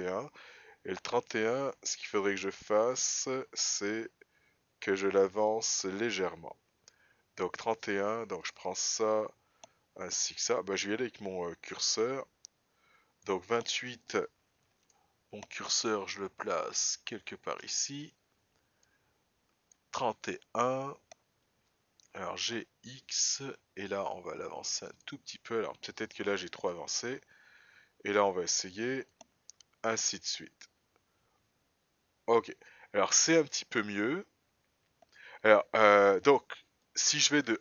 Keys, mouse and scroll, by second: 4.4 Up, 5.5 Down, 6.7 Up, 8.8 click, 12.2 click, 15.3 shift+right click, 19.3 click, 22.7 g, 27.0 click, 29.1 click, 30.3 Up, 30.7-32.2 Up, 32.7 Up, 32.9 Up, 33.3-33.9 Down, 34.5 Down, 34.6 Down, 34.9-36.6 Down, 37.3 click.